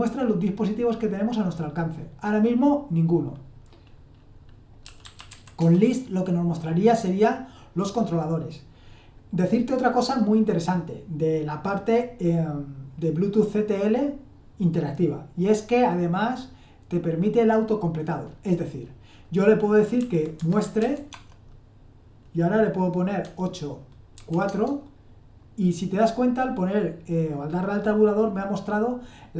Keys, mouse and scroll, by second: 4.6-5.8 typing, 19.7-21.6 typing, 23.2-24.1 typing, 24.5 Tab.